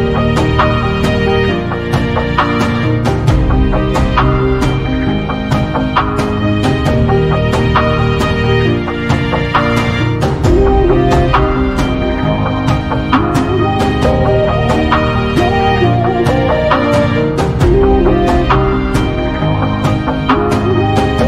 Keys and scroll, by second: 11.7 space, 19.5 space.